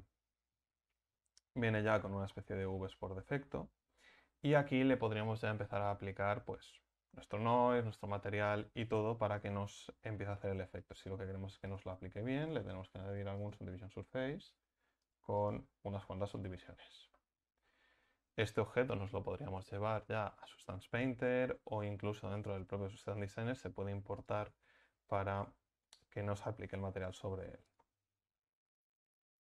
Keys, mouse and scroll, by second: 1.6 middle click, 3.5-13.5 middle drag, 13.5-15.9 drag, 15.9 middle click, 17.0 middle click.